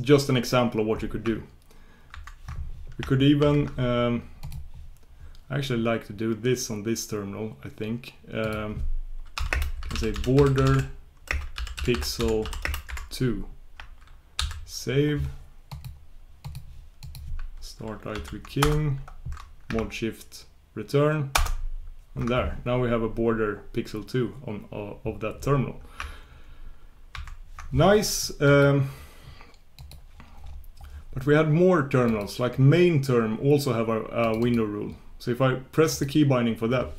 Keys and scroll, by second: 16.5 shift+super+q.